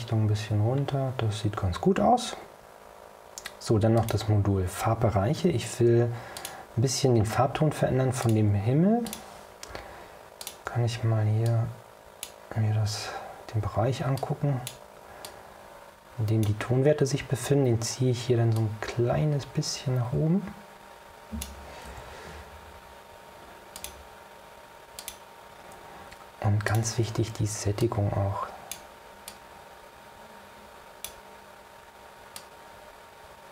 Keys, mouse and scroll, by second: 0.6-1.0 scroll down 2, 4.1 click, 6.5 click, 8.3 click, 9.2 click, 10.5 ctrl+click, 11.6-12.6 drag, 14.3 click, 15.3 click, 18.7 click, 22.0 o, 23.9 click, 25.1 click, 26.8 click, 27.9 click, 29.4 click, 32.5-33.5 drag.